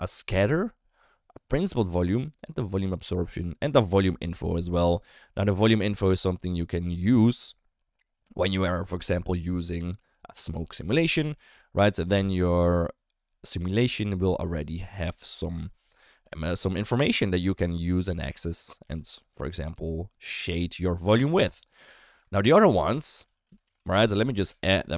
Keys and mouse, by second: 16.1 g, 16.8 d, 17.0-18.9 drag, 18.9 d, 19.1 d, 19.2-21.8 right drag, 21.8 d, 22.1 click, 22.3 ctrl+x, 22.8 shift+a.